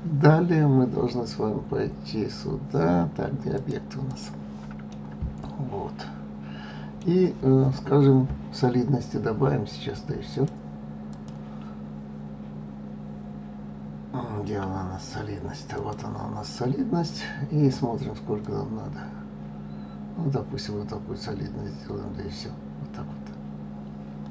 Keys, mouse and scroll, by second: 3.6-4.9 drag, 4.9-7.9 middle drag, 10.3 click, 11.1-14.1 drag, 18.4-21.4 drag.